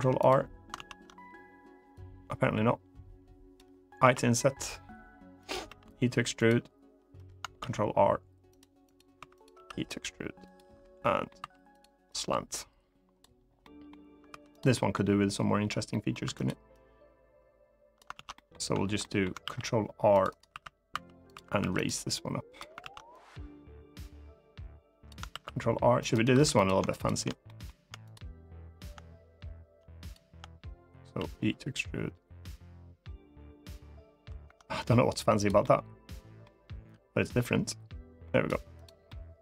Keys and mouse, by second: 0.5 ctrl+z, 1.7-3.3 drag, 3.8 i, 5.1 click, 5.4 e, 6.1 click, 7.3 ctrl+r, 8.6 click, 8.9 3, 9.3 e, 10.2 click, 10.7 middle click, 11.1 2, 11.4 click, 11.9-13.0 drag, 13.3 middle click, 14.0 3, 14.3 click, 14.5 middle click, 16.0 2, 16.1 click, 16.5-17.7 drag, 17.9 ctrl+z, 18.1 middle click, 18.7 middle click, 19.1 ctrl+r, 20.0 right click, 20.2 3, 20.7 2, 21.0 click, 21.1 3, 21.3 3, 21.6 click, 22.6 ctrl+z, 22.9-24.8 drag, 25.0 ctrl+r, 26.0 3, 26.4 click, 26.6 shift+click, 27.2 middle click, 29.7 shift+click, 30.9 e, 35.1 click, 35.3 middle click, 37.0-38.2 drag, 38.8 middle click.